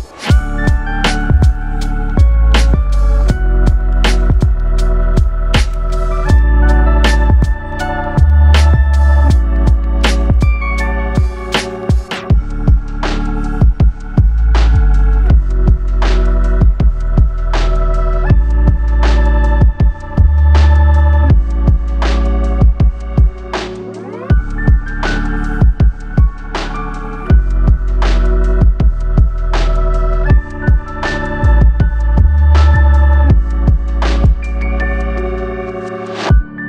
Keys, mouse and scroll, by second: 0.8 click, 2.4-2.7 scroll down 2, 2.7 middle click, 4.7 middle click, 5.3 scroll up 1, 6.0 click, 6.9 click, 8.4 click, 9.3 click, 10.9 click, 12.2 click, 13.7 click, 15.1 middle click, 15.7-16.4 scroll up 1, 16.4 click, 17.5 click, 18.0 click, 18.6 click, 19.1 click, 19.6 click, 20.2 click, 20.9 click, 21.4 click, 21.6 click, 22.1 click, 22.7 click, 23.4 click, 24.0 click, 24.7 click, 25.5 click, 27.4 click, 28.5 click, 30.3 click, 31.6 click, 32.4 click, 34.2 click, 35.0 click, 36.2 click.